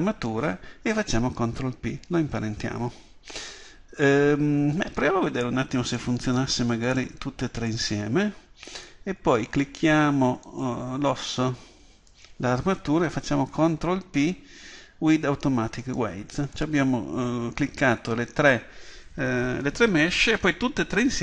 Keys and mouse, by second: 5.9-9.3 right drag, 10.5 right click, 13.6 ctrl+p.